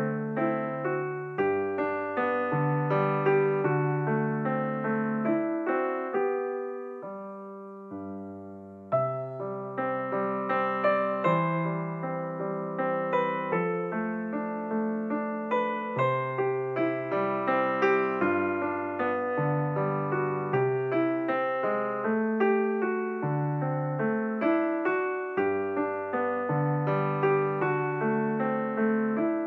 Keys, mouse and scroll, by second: 1.1 x, 4.6 click, 5.7 x, 9.1 Tab, 9.7 click, 10.8 Tab, 12.4 Tab, 13.9 click, 15.5 click, 16.9 click, 18.0-18.6 drag, 21.5 Tab, 24.4 click, 25.6 click, 27.4-28.9 scroll down 1, 28.9 scroll up 1.